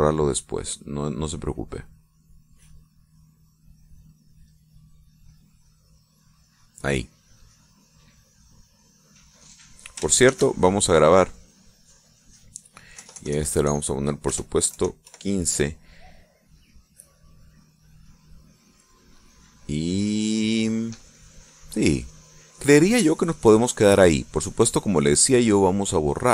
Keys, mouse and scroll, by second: 2.5 scroll up 1, 2.7 middle click, 3.9-5.5 drag, 5.5-5.9 scroll up 1, 5.9 click, 6.1-7.1 scroll up 2, 6.1 click, 7.1 click, 7.4 scroll up 1, 7.7 click, 8.9-10.8 drag, 11.3 ctrl+shift+s, 12.3 click, 14.0 BackSpace, 15.7 KP_5, 16.1 KP_Enter, 17.7-18.8 drag, 19.9 click, 23.1-25.1 drag, 25.9 click.